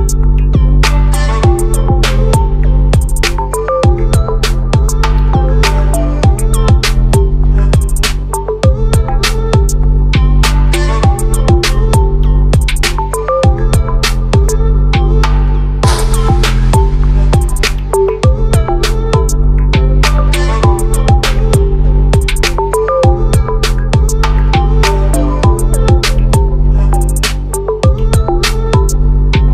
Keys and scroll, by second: 0.4 ctrl+0, 10.1 ctrl+a, 14.2 ctrl+t, 25.9 ctrl+a.